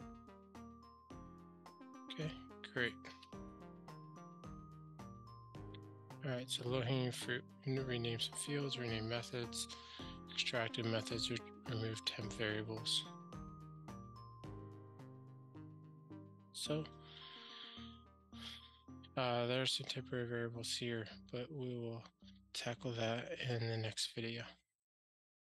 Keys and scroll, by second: 3.3 super+BackSpace.